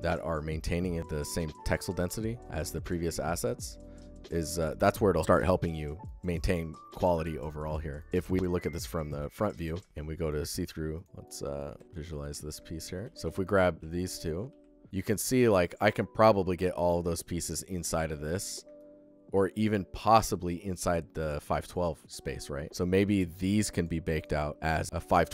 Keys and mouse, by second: 2.4-3.3 alt+shift+drag, 5.9 alt+shift+click, 7.6 alt+shift+click, 8.3 click, 9.4 alt+shift+click, 9.8 ctrl+click, 9.9 alt+z, 10.0 click, 13.2 ctrl+click, 13.8 ctrl+f, 13.8 click, 14.1 click, 15.1 click, 18.6-19.1 alt+middle drag, 19.2-21.6 ctrl+alt+middle drag, 22.1 alt+middle drag, 23.1 ctrl+z, 23.6 click, 24.0 click, 24.8 alt+z.